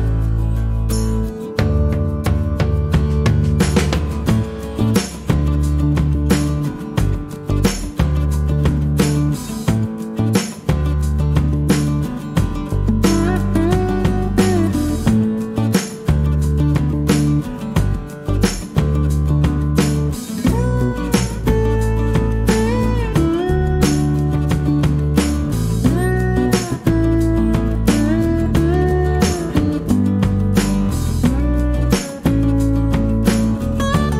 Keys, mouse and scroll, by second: 1.3 click, 2.4 click, 3.1 click, 3.8 middle click, 4.2-6.0 drag, 6.9 click, 7.7 click, 9.1 click, 10.6 click, 11.5 click, 12.4 click, 13.2 click, 14.4 click, 15.5 click, 16.5 -, 17.1 click, 18.4 click, 18.8 middle click, 18.9 click, 20.6 click, 24.1 click, 24.9 click, 24.9 middle click, 25.3 middle click, 25.4 click, 26.0 click, 30.7 click.